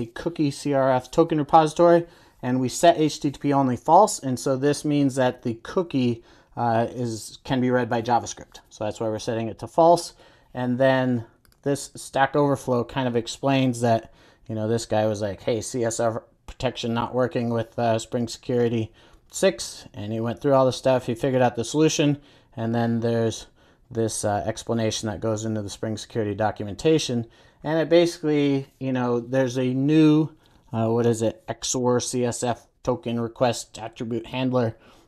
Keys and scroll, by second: 11.7 super+b.